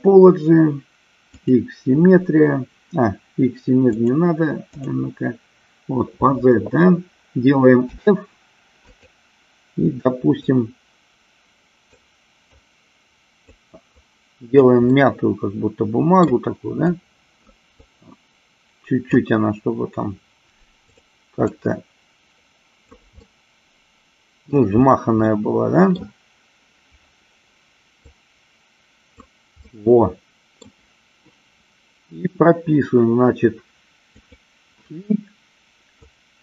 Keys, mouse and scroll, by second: 4.1 click, 8.1 f, 10.7-12.1 drag, 12.8-13.9 drag, 14.3 click, 15.1-16.5 middle drag, 17.0 click, 18.0-19.5 drag, 21.1 click, 21.8-23.3 drag, 23.4-24.7 middle drag, 25.5 middle click, 28.3-29.4 drag, 29.9 middle click, 34.5 click, 36.3-36.4 drag.